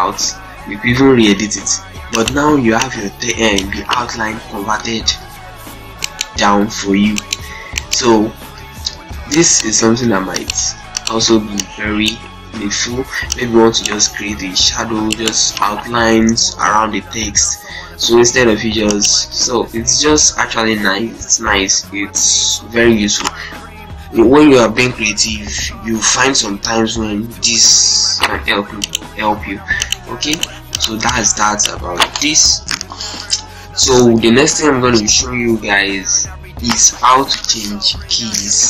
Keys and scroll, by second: 1.2 ctrl+space, 2.3 z, 3.9 ctrl+space, 4.2 shift+F2, 5.6 z, 6.3 ctrl+space, 6.8 ctrl+z, 8.3 ctrl+space, 10.4 shift+c, 11.0 shift+z, 12.3 ctrl+space, 14.7 z, 15.2 ctrl+space, 29.2 shift+c, 29.9 shift+c, 30.0 shift+c, 31.8 Delete.